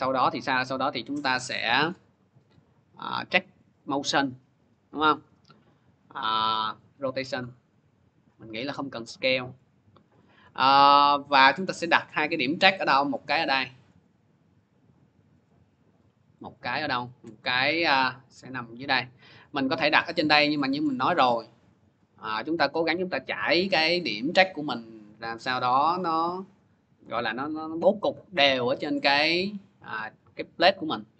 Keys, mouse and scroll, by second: 0.5 click, 3.7 click, 6.5 click, 6.8 click, 9.4 click, 9.4 scroll, 11.8 middle click, 13.6 scroll up 1, 15.4 click, 16.8 middle click, 19.1 click, 19.7 middle click, 20.7 middle click, 20.9 middle click, 28.8-29.8 scroll, 29.8 scroll, 29.8 middle click, 29.8-30.6 scroll up 2.